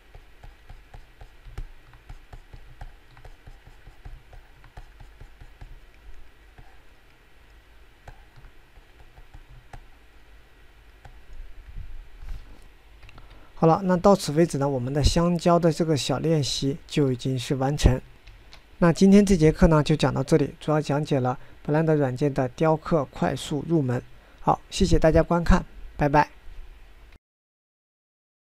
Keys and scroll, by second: 14.5 9, 19.9 9.